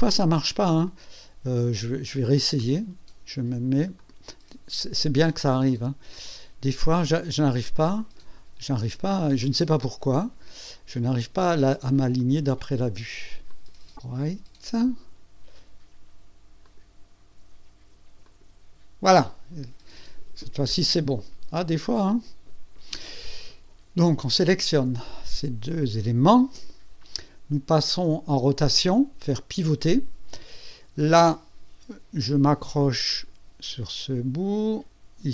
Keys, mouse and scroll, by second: 0.9-1.7 drag, 4.0 click, 6.1 click, 7.6 click, 8.1 click, 9.4 click, 12.2 click, 12.5 click, 13.5 click, 16.6 click, 18.2 click, 24.1 click, 26.3 ctrl+click, 29.5 click, 33.1 click.